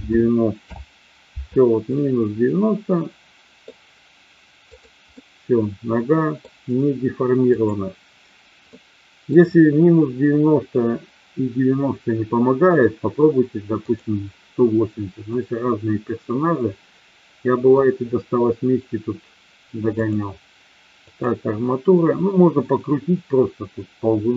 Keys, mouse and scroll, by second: 1.8-3.6 middle drag, 4.7 click, 5.1-6.3 middle drag, 7.5 click, 8.6-9.3 middle drag, 15.3-17.8 middle drag, 19.8-21.3 drag.